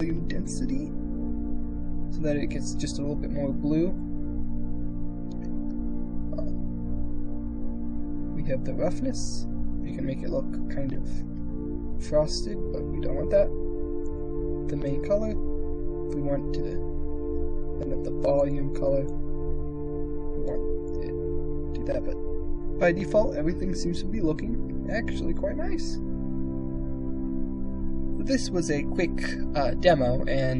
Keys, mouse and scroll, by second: 8.2-12.2 drag, 13.8 click, 18.1 click.